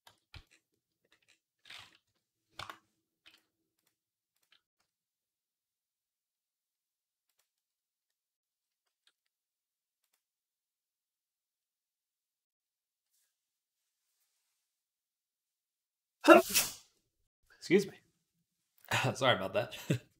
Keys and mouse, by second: 0.2 z, 4.6 s, 7.5 middle click, 8.7 s.